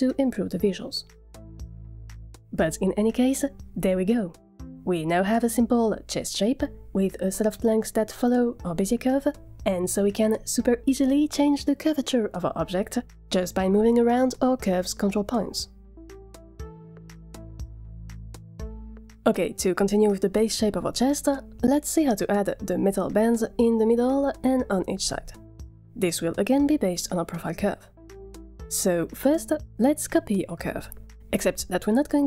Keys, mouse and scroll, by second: 0.5 Tab, 1.8 click, 3.1-4.3 middle drag, 4.5-4.8 scroll down 2, 4.8 middle drag, 5.3 shift+middle click, 7.5 click, 7.7 z, 8.2 middle click, 8.5 click, 9.4 z, 10.2-10.6 middle drag, 10.7 Tab, 11.6 g, 14.2 click, 14.4 g, 14.9 middle click, 15.3 ctrl+z, 15.4 click, 15.4 middle click, 15.7 g, 16.0 middle click, 16.2 g, 16.5 s, 16.9 s, 17.3 middle click, 18.8 ctrl+z, 19.2 ctrl+z, 19.9 ctrl+z, 20.8 middle click, 21.7 Tab, 22.2 middle click, 26.5 z, 26.7 middle click, 26.9 shift+middle click, 27.2 z.